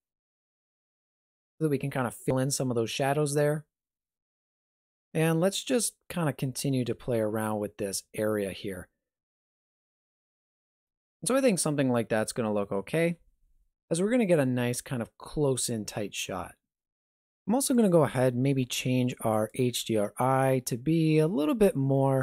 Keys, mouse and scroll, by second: 5.6 right click, 6.1 g, 10.4 alt+shift+z, 12.9 alt+shift+z, 16.8 click, 17.8 click.